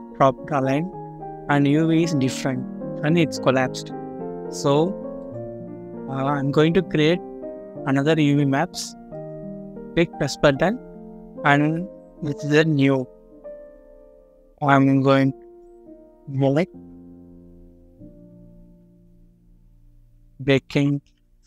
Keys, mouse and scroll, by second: 0.2 scroll up 1, 0.9 scroll down 1, 5.6-5.9 scroll up 1, 13.6 double click, 16.7-18.6 typing, 19.9-20.9 typing.